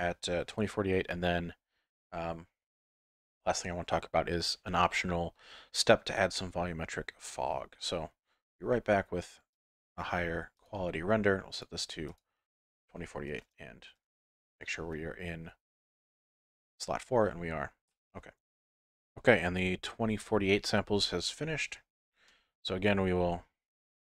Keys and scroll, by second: 15.6 F11.